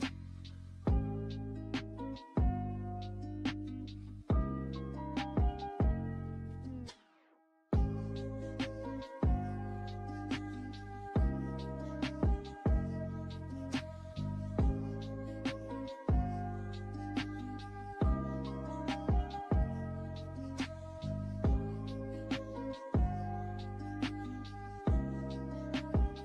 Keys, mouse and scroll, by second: 1.2 click, 4.7 click, 11.2-19.6 drag, 23.0 click.